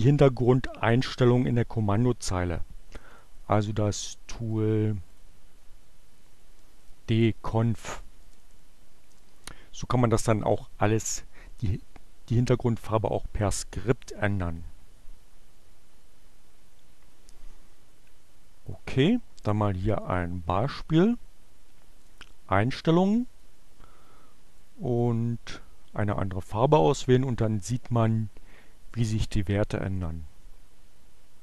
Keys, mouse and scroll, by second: 3.1 click, 4.3 click, 5.2 click, 5.5-8.5 typing, 9.3 Return, 18.5 click, 20.6 click, 21.9 click, 23.5-24.9 drag, 25.1 click, 26.9 click, 29.9 click.